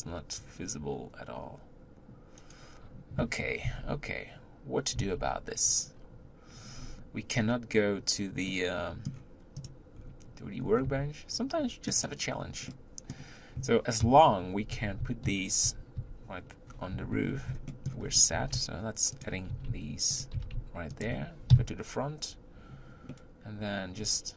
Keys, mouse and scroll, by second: 3.8 z, 5.2 z, 6.7-7.1 scroll up 5, 8.5-9.7 middle drag, 9.7 click, 10.0-10.8 scroll up 5, 10.8 s, 12.7-14.0 middle drag, 14.0-16.9 typing, 17.7-18.1 shift+middle drag, 18.1 scroll up 1, 18.3 g, 19.6 r, 21.5 KP_1, 23.1-24.3 middle drag.